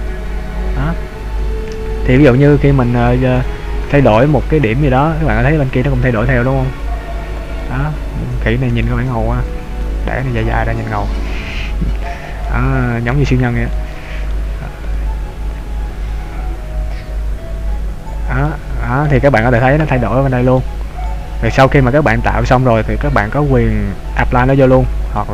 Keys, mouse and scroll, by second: 3.3 right click, 4.3 click, 6.8 click, 7.6 middle click, 11.5 click, 12.4 middle click, 13.8 middle click, 15.2 right click, 16.3 click, 17.6 click, 18.6 middle click, 19.3 middle click, 20.6 middle click, 21.6-22.5 scroll up 2, 22.5-23.7 scroll down 3, 24.2 middle click, 25.2 middle click.